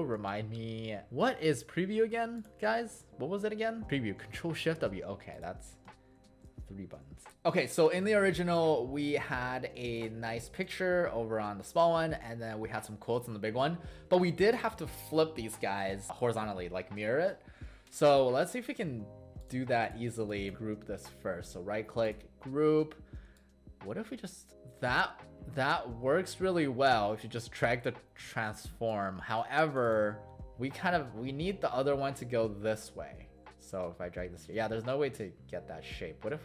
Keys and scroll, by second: 1.3 shift+w, 6.2 ctrl+shift+w.